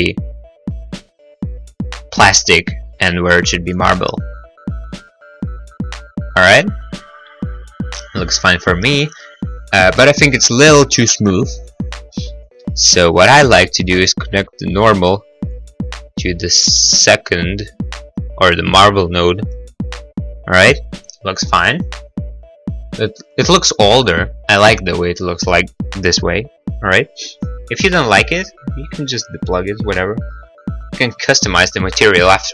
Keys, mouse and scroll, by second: 5.3 scroll, 8.6 middle click, 8.9 middle click, 9.2-9.6 scroll, 12.9 middle click, 13.2 middle click, 14.3 click, 24.2 middle click, 24.5 middle click.